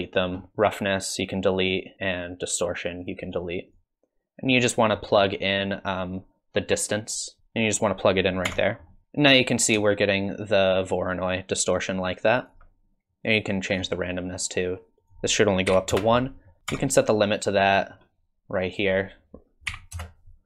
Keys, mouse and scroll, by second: 0.3-1.2 scroll down 8, 1.2 click, 1.9 scroll down 1, 3.0 click, 3.7 click, 5.0 middle click, 6.7 click, 8.4 Tab, 8.9 middle click, 9.8 shift+click, 13.1 click, 15.0 click, 16.6 click, 16.7 Tab, 17.7-18.0 scroll down 6, 18.7 click.